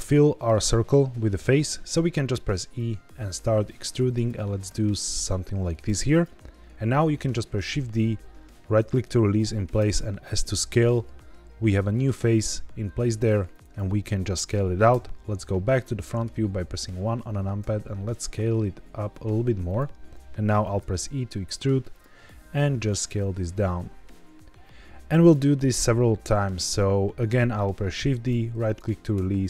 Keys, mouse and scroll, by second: 2.2 e, 4.1 click, 4.6 s, 6.0 click, 7.6 shift+d, 8.7 right click, 9.7 s, 13.4 click, 14.8 KP_1, 15.7 shift+middle click, 16.4-17.5 scroll down 1, 17.5 s, 19.6 click, 20.7 e, 21.8 click, 22.1 s, 25.1 click, 27.9 shift+d, 28.6 right click, 29.1 s.